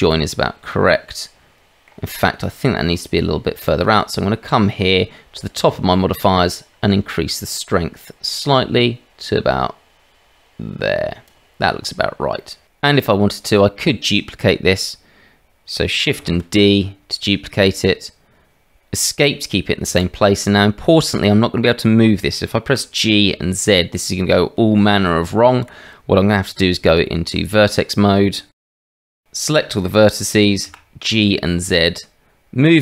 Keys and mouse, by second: 0.7-1.9 drag, 0.7-1.9 right drag, 3.7 click, 6.6-11.3 drag, 12.4 middle drag, 16.2 shift+d, 22.7 g, 26.6 Tab, 28.5 shift+z, 29.0 click, 30.6 g.